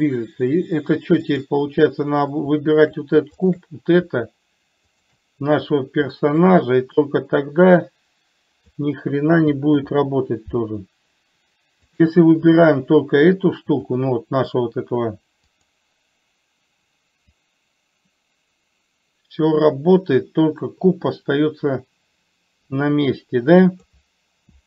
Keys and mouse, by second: 3.7 shift+click, 5.4 shift+click, 6.6 middle click, 7.5-9.2 drag, 10.1 ctrl+z, 12.4 click, 14.2 click, 15.9 click, 17.7-24.2 drag.